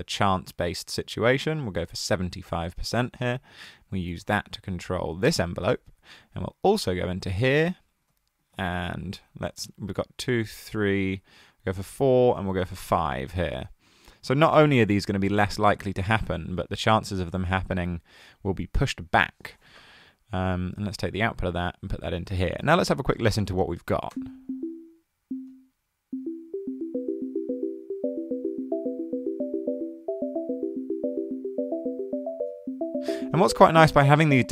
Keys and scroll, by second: 8.1 super+c, 8.6 super+v.